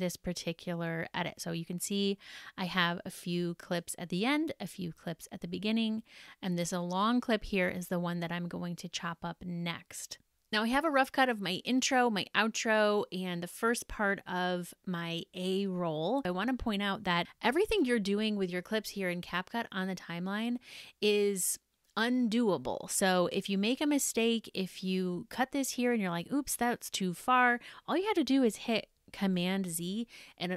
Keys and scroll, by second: 18.6 super+-, 29.0 super+z.